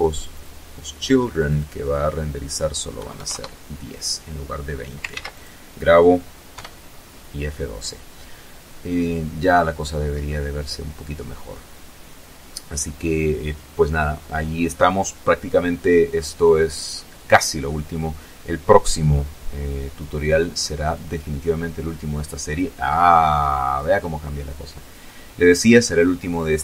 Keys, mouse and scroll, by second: 0.8 KP_1, 1.2 KP_Enter, 3.0 ctrl+s, 3.2 ctrl+click, 4.4 F12.